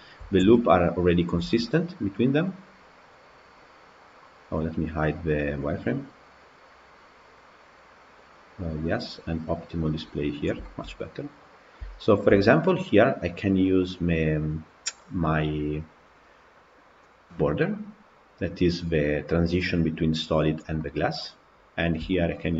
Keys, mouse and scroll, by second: 0.6 Tab, 1.0 click, 1.6 Tab, 2.9 click, 5.7-7.6 drag, 8.5-10.0 drag, 10.5 shift+middle click, 11.2 click, 17.2 click, 18.5 click, 18.9-21.8 middle drag, 21.8 click, 22.4 shift+click.